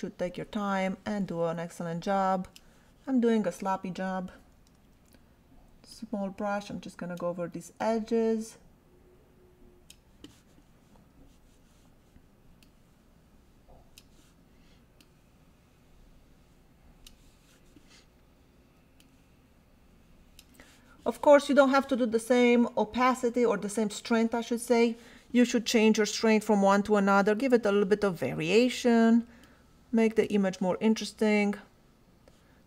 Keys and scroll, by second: 4.7 [, 10.9 ], 18.6 ], 28.6 [.